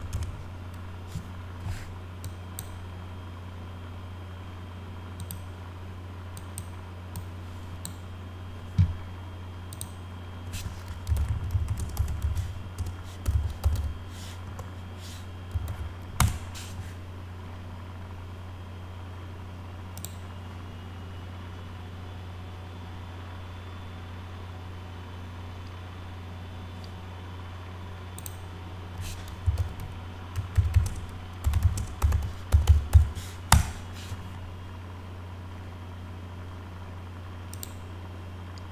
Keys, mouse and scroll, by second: 0.1 Caps_Lock, 2.2 click, 5.2 click, 6.3 click, 7.1 click, 9.7 click, 10.8-16.2 typing, 19.9 click, 28.2 click, 29.1-33.4 typing, 37.5 click.